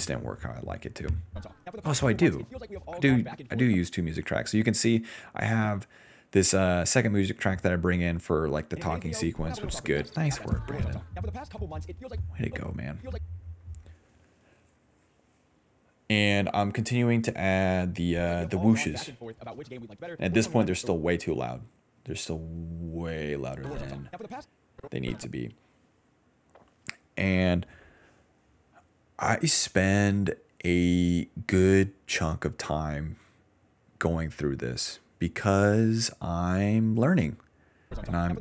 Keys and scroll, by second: 1.3 space, 1.5 d, 1.9 d, 2.6 s, 3.7 space, 5.0 s, 8.7 space, 9.0 d, 9.5 d, 10.9-13.1 typing, 15.6-21.5 typing, 23.5-25.2 typing, 35.6 d, 35.8 d, 37.8-38.4 typing.